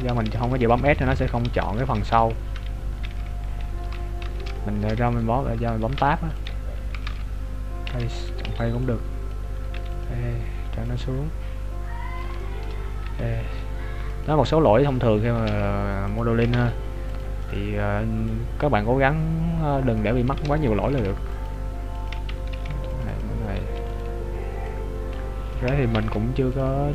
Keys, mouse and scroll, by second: 3.2 KP_3, 3.8 z, 4.5 shift+middle click, 4.5 z, 5.2 right click, 5.9 ctrl+Tab, 8.4 b, 10.0 e, 10.9 click, 12.4 shift+middle click, 13.1 e, 15.5 ctrl+Tab, 16.5 ctrl+Tab, 17.5 right click, 18.3 click, 20.9 ctrl+r, 23.8 alt+right click, 24.7 click, 25.9 ctrl+Tab.